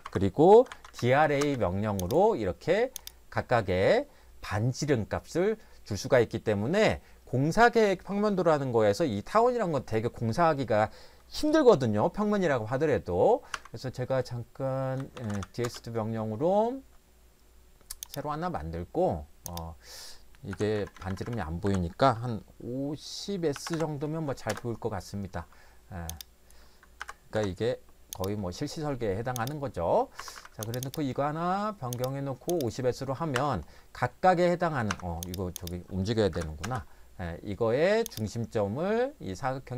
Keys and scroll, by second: 0.0 Escape, 0.3-1.4 typing, 13.5 Escape, 14.7-15.9 typing, 20.5 Delete, 20.8 Right, 21.0 Right, 21.1 Right, 21.2 Right, 21.6 Delete, 23.3-24.2 typing, 24.5 Return, 27.0 5, 27.4 0, 30.2 Escape, 30.4 Escape, 30.5 Escape, 33.4 Escape, 34.9 Escape, 36.4 m, 36.6 space.